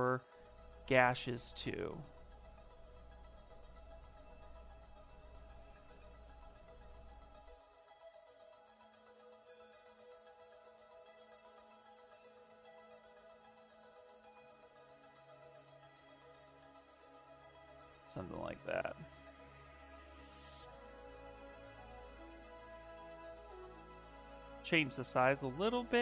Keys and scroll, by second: 22.6 s, 23.1 space.